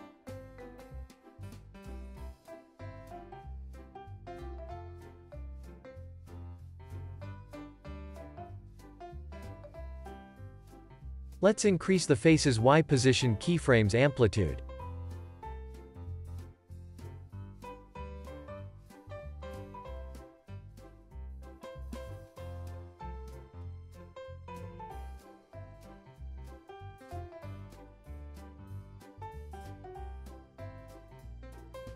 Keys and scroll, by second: 1.9 super+s, 2.6 space, 7.7 space, 11.9 x, 14.9 z, 21.1 alt+shift+s, 24.6 x, 26.9 alt+shift+w, 28.6 super+s, 28.9 space.